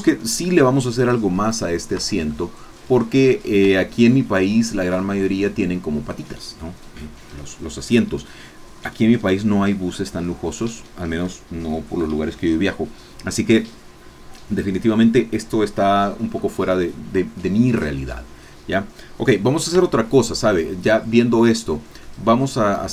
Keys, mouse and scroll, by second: 1.5 middle click, 2.1 Tab, 2.3-3.7 drag, 3.7 Tab, 19.9 Tab, 22.0 click.